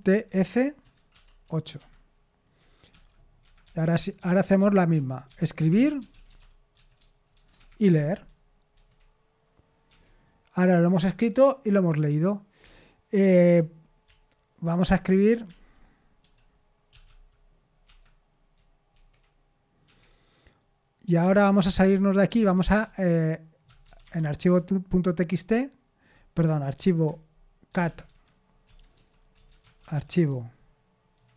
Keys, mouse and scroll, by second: 0.0-1.4 typing, 1.8 Escape, 3.4 Escape, 3.6-7.3 typing, 7.6 Escape, 8.7 F5, 9.9 Escape, 12.6-13.5 k, 14.0-14.9 l, 16.2-17.5 typing, 17.8 Escape, 18.9 F5, 19.8 Escape, 21.3-24.3 typing, 24.4 Return, 27.5-30.4 typing.